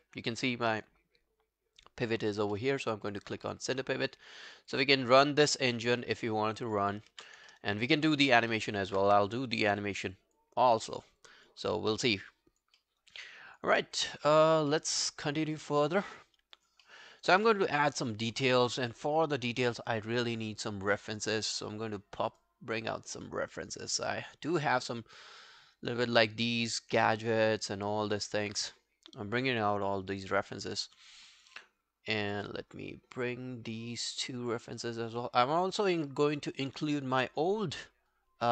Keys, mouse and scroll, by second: 3.5 alt+middle click, 3.7 alt+right click, 4.0 alt+click, 7.1 ctrl+z, 7.5 alt+middle click, 7.7 alt+right click, 8.0 alt+click, 8.5 alt+middle click, 8.8 alt+right click, 9.1 q, 9.9 alt+right click, 10.2 alt+click, 10.7 alt+middle click, 10.9 alt+right click, 11.2 alt+click, 11.8 alt+middle click, 12.1 alt+scroll down 1, 12.4 alt+click, 12.8 alt+middle click, 13.0 alt+right click, 13.3 alt+click, 13.8 alt+middle click, 14.0 alt+right click, 14.2 alt+click, 14.7 alt+middle click, 15.1 alt+scroll down 1, 15.3 alt+click, 16.9 alt+middle click, 17.1 alt+right click, 17.4 alt+middle click, 17.7 alt+right click, 17.9 alt+click, 20.5 right click, 22.8 double click, 26.2 scroll down 2.